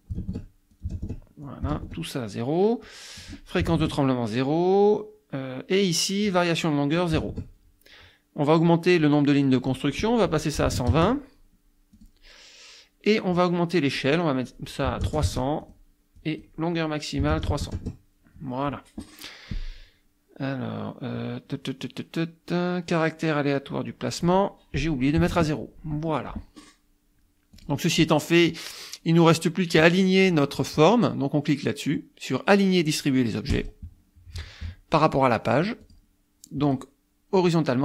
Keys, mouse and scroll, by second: 0.0 click, 0.3 KP_Enter, 0.7 click, 0.9 KP_0, 1.0 KP_Enter, 1.5 click, 1.8 KP_Enter, 2.9 click, 3.6 KP_0, 3.7 KP_Enter, 7.0 click, 7.2 KP_0, 7.4 KP_Enter, 9.5 click, 10.6 KP_1, 10.7 KP_2, 10.9 KP_0, 11.9 click, 14.0 click, 14.9 KP_3, 15.1 KP_0, 15.6 click, 16.2 click, 17.2 KP_3, 17.3 KP_0, 17.8 KP_Enter, 24.1 click, 25.2 KP_0, 25.3 KP_Enter, 27.6 click, 33.5 click, 34.9 click, 36.7 click, 37.4 click.